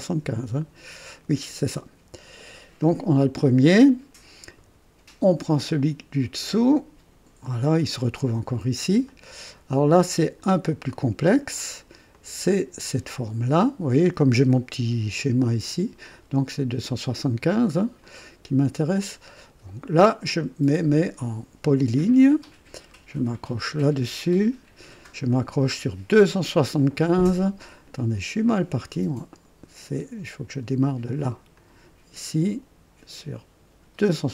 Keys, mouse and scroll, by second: 2.4 click, 5.5 click, 6.4 click, 8.4-8.7 scroll up 1, 9.1-10.2 right drag, 10.4 scroll up 1, 10.9 right click, 12.1 click, 18.0 click, 20.7 click, 23.5 click, 27.5 Escape, 29.3 click, 31.5 click, 34.0 click.